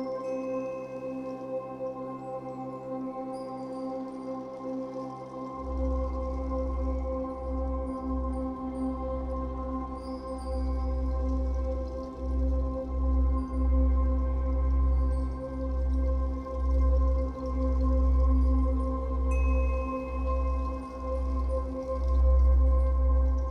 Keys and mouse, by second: 0.3-1.2 typing, 2.3-3.8 typing, 3.8 Return, 5.9 click, 6.9-11.0 drag, 11.9 click, 16.9 click, 21.7 click.